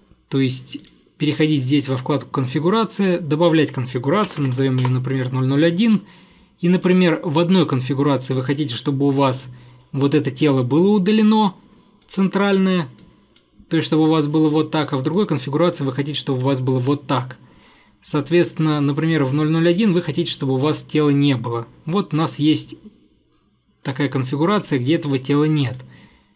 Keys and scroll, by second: 4.1-5.2 typing.